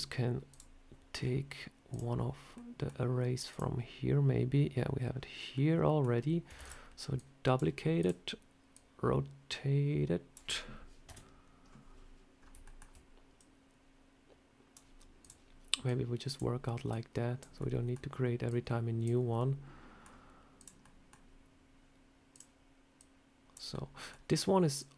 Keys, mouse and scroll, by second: 0.3 click, 1.0 scroll down 4, 1.8 click, 2.4 middle click, 3.3 click, 5.0 scroll up 2, 5.4 middle click, 6.4 shift+d, 7.0 click, 7.8 click, 8.9 click, 10.9 KP_7, 12.2 scroll up 2, 12.5 shift+middle click, 13.2 click, 15.1 click, 15.7 click, 16.7 click, 17.4 scroll up 1, 17.5 middle click, 18.3 click, 19.2 middle click, 20.4 click, 20.7 middle click, 22.2 click, 22.8 click, 23.6 middle click, 24.6 click.